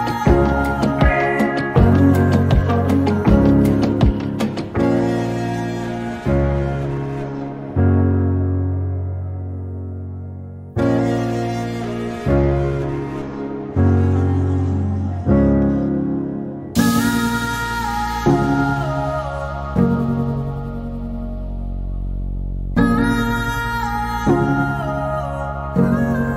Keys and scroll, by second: 3.1 r, 7.8 r, 10.3 f, 13.8-16.6 typing, 18.3-19.1 typing, 20.5 m, 21.6 typing, 24.6 p.